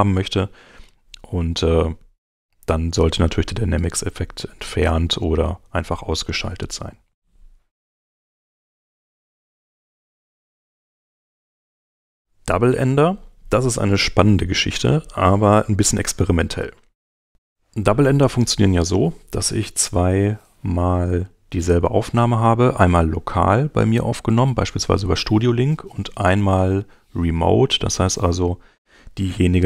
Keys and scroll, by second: 8.1 super+Tab, 16.6 super+Tab.